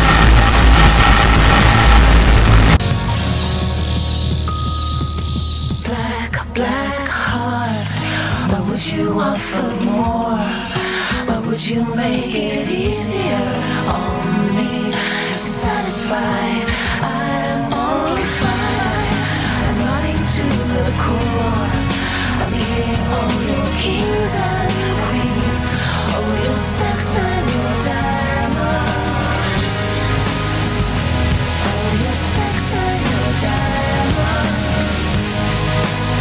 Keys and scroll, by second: 2.8 Page_Down.